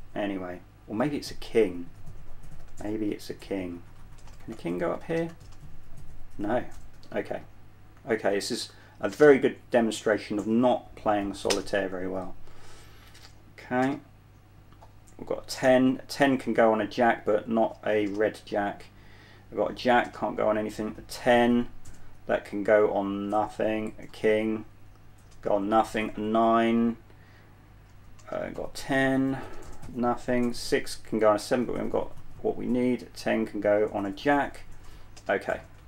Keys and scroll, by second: 2.5-7.5 typing, 9.0-9.4 typing, 11.8 typing, 14.1 typing, 15.8 typing, 18.3 typing, 23.8 space, 25.6 space, 28.5 space, 29.8 space, 31.7 space, 34.4-35.8 typing.